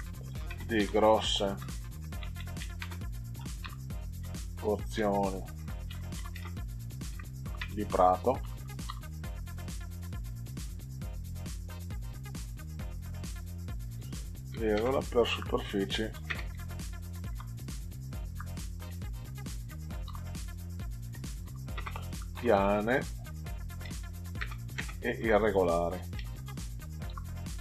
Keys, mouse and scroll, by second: 0.0-9.6 typing, 14.7 space, 16.1 r, 16.5 s, 17.2 u, 18.3-27.6 typing.